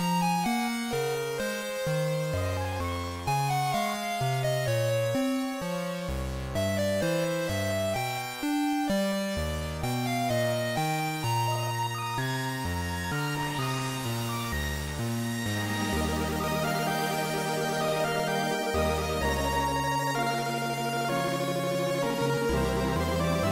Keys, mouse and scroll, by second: 6.1 click, 7.9 KP_0, 13.0 right click, 17.8 click.